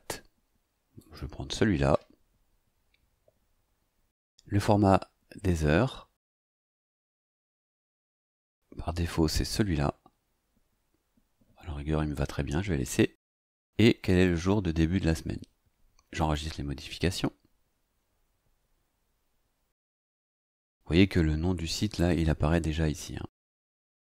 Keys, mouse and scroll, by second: 1.0 click, 3.1-3.5 scroll down 2, 16.2 click.